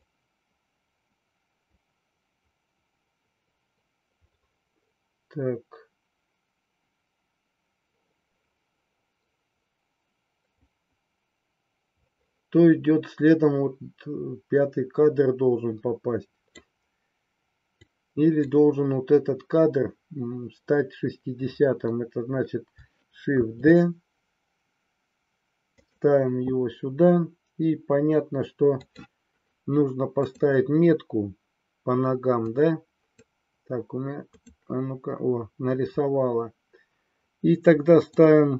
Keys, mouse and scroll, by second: 17.8-18.3 drag, 23.4 shift+d, 25.8 click, 28.8 click, 30.2 click, 32.4 click, 34.2 click, 38.1 click.